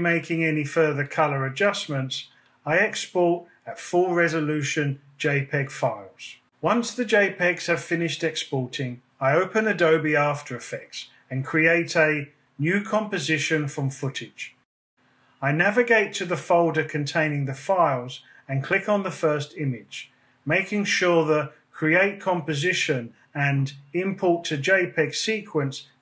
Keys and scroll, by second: 8.6 space.